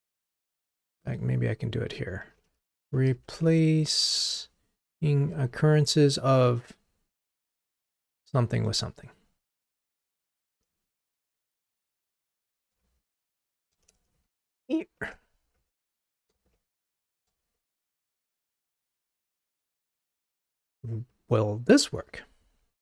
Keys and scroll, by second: 0.6 super+BackSpace, 9.9 Return, 15.7 Tab.